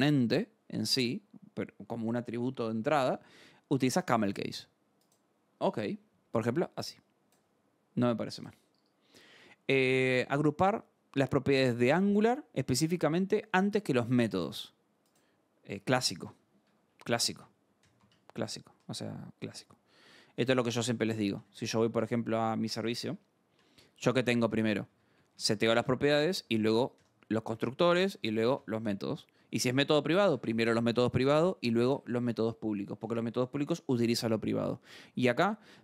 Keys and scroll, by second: 0.7 alt+Tab, 8.7 scroll, 15.7 alt+Tab, 16.6 Escape, 16.7 j, 17.8 shift+j, 18.0 shift+v, 18.4 Escape, 18.7 u, 20.9-22.1 typing, 22.4 Down, 23.1 Return, 23.5 j, 23.8 k, 25.1-29.0 typing, 26.1 Escape, 29.3 Escape, 30.3-32.4 typing, 34.8-35.8 typing.